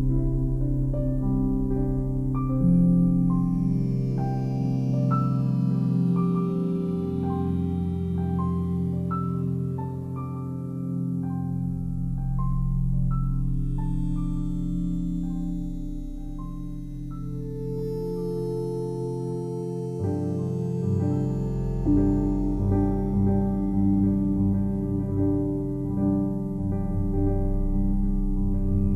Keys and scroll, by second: 1.3 ctrl+alt+z, 6.9 ctrl+j, 7.8 ctrl+j, 21.9 ctrl+e, 23.0 ctrl+j, 24.7 space, 25.1 ctrl+j, 25.9 ctrl+j, 26.4 ctrl+j, 27.5 ctrl+e, 27.6 ctrl+j, 28.5 ctrl+j.